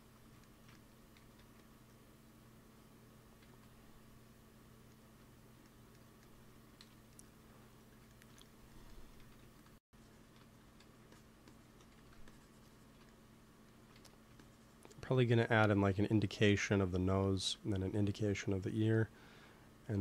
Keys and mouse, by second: 1.1 g, 1.3 f, 2.0-5.2 drag, 3.3 ctrl+s, 4.3 right click, 6.7 KP_1, 9.1 x, 9.3 f, 9.8-12.7 drag, 10.5 x, 10.7 f, 11.8 f, 13.0-14.0 drag, 13.9 f, 14.3-16.2 drag, 15.6 ctrl+s, 16.2-17.3 middle drag, 19.0-20.0 middle drag.